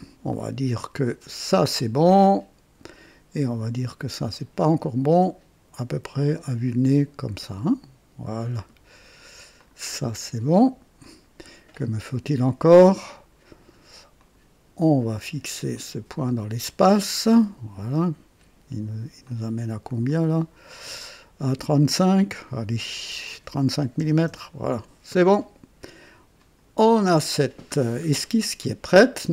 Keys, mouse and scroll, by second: 0.3 click, 1.5 click, 4.3-7.8 drag, 8.4 click, 9.6 click, 11.0 click, 14.1 click, 15.7 click, 19.2-20.6 drag, 23.4 KP_3, 24.0 KP_5, 24.2 KP_Enter, 26.3 click, 27.7 scroll down 1, 28.2 right click.